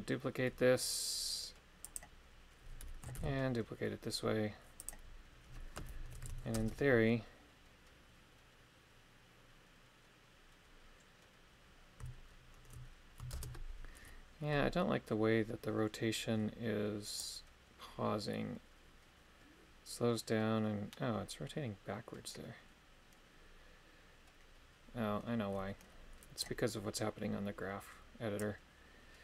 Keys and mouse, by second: 1.8 click, 3.1 shift+d, 4.8 click, 6.1 shift+Left, 6.5 shift+space, 13.4 shift+space, 17.2-22.2 drag, 28.5 click.